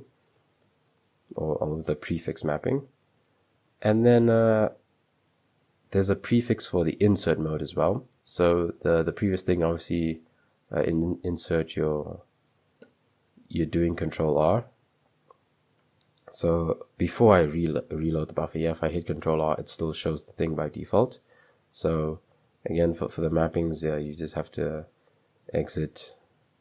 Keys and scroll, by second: 0.0 typing, 1.6-4.9 typing, 6.9-7.6 typing, 18.9 ctrl+r, 20.7 Escape, 21.6 typing, 22.6 Escape, 23.1-24.8 typing, 25.2 Up, 25.4 Return, 26.4-26.6 typing.